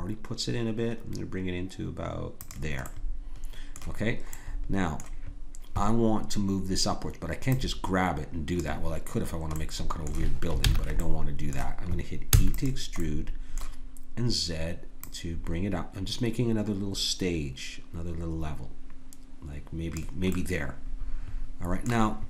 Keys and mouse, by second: 2.9 click, 10.6 ctrl+z, 12.3 e, 15.0-18.2 drag, 20.3-22.2 middle drag.